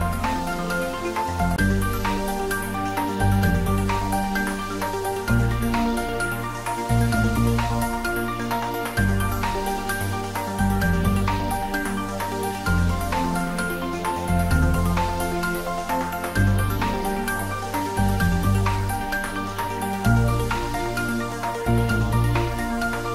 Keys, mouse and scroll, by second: 1.5 click, 3.1-3.8 scroll up 1, 3.8-4.7 middle drag, 7.6 middle click, 9.0 click, 9.6 3, 9.9 click, 11.1 Tab, 11.6 click, 12.5 3, 12.7 click, 13.7 g, 14.1 z, 15.4 click, 15.8-16.1 scroll down 1, 16.1-16.7 middle drag, 18.2 Tab, 19.0 shift+a, 22.1 click.